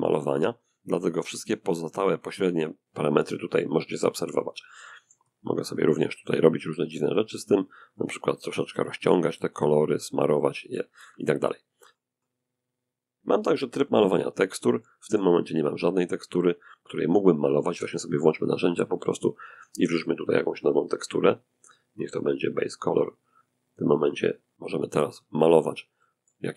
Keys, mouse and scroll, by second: 3.7-6.0 drag, 4.1-6.0 middle drag, 6.4 click, 6.9-11.6 drag, 10.7 middle click, 13.2 click, 14.0 click, 17.5 click, 19.8 click, 21.4 click, 21.9 click, 23.2 click, 24.2-25.9 drag, 25.2 middle click, 26.1-26.5 scroll down 1.